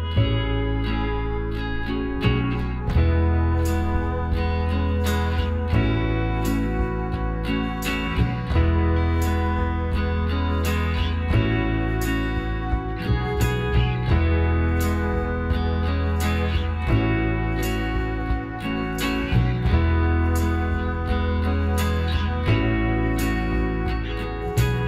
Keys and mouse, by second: 0.3-3.3 middle drag, 3.3-5.0 drag, 4.7-7.6 right drag, 6.5-8.2 middle drag, 8.0-9.8 right drag, 9.1 ctrl+z, 10.1-12.0 right drag, 12.0 middle click, 12.4 right click, 13.2-14.7 middle drag, 13.8 s, 16.7-18.4 drag, 17.5-20.1 right drag, 19.9 KP_7, 20.5 middle click, 21.6 s.